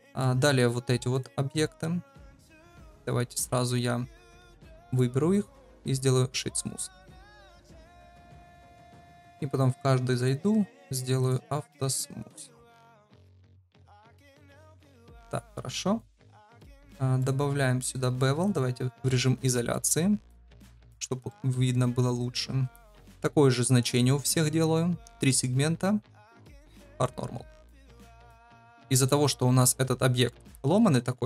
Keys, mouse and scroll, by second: 2.6 click, 4.8 shift+click, 5.7 right click, 7.3 drag, 7.9 click, 8.8 click, 9.2 click, 10.1 click, 12.2 click, 16.6 click, 19.7 middle click, 20.8 ctrl+v, 21.2 shift+middle drag, 25.0 click, 25.2 click, 26.3 drag, 27.0 click, 28.7 middle click, 29.0 middle click, 29.7 Tab, 30.8 Tab.